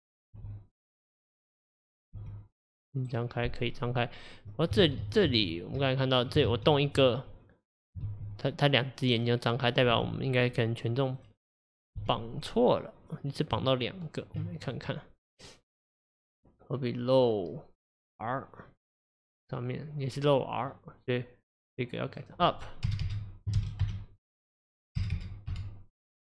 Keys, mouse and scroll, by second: 0.0 click, 0.4 r, 1.8 click, 2.2 r, 4.6-4.9 middle drag, 4.9 ctrl+z, 5.1 ctrl+z, 5.4 ctrl+z, 5.9-6.6 middle drag, 6.6 ctrl+z, 8.1 r, 10.0 r, 11.3 click, 12.0 r, 13.6 Tab, 14.7 click, 18.8 click, 21.6-23.1 drag, 23.1 BackSpace, 25.2 BackSpace.